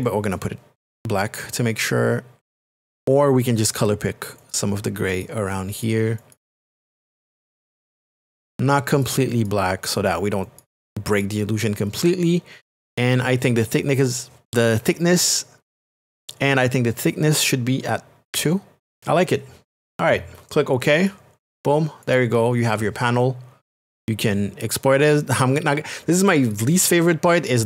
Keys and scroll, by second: 18.3 KP_2.